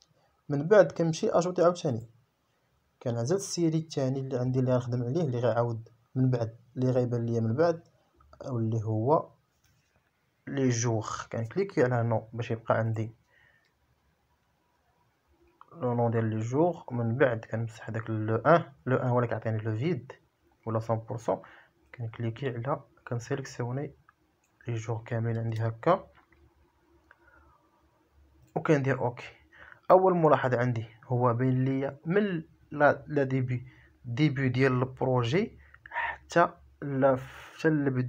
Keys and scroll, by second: 14.0 BackSpace, 25.6 Return.